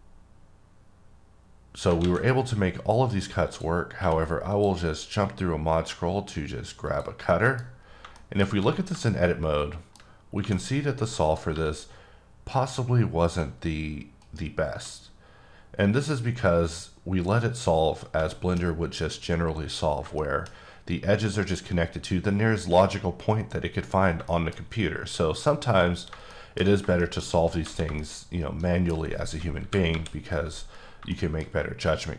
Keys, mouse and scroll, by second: 1.8 alt+Num_Lock, 2.0 alt+a, 3.5 click, 4.0 q, 4.5 click, 5.4-6.5 scroll down 1, 6.9 click, 7.3 middle click, 7.6-8.0 scroll up 3, 8.1 shift+middle click, 8.4 scroll up 1, 9.0 shift+middle click, 10.1 scroll up 2, 10.4 2, 11.2 click, 11.5 g, 14.9-15.3 scroll down 2, 15.6-17.1 scroll down 1, 18.3 middle click, 18.7-20.0 scroll up 2, 20.2 shift+middle click, 20.4-21.0 scroll up 2, 22.9 scroll up 1, 23.8-24.3 scroll down 3, 24.3 shift+middle click, 24.5-25.6 scroll up 2, 25.6-26.3 scroll down 3, 26.3 shift+middle click, 26.6 shift+scroll down 2, 27.0 shift+middle click, 27.2-27.6 scroll down 2, 28.0 shift+middle click, 29.5 KP_8, 29.9 KP_7, 30.8-31.1 scroll down 2, 31.1 shift+middle click.